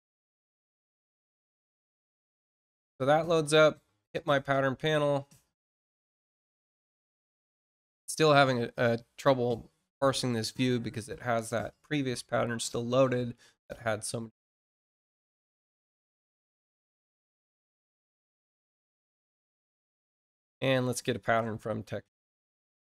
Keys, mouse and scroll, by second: 3.2 click, 21.2 click.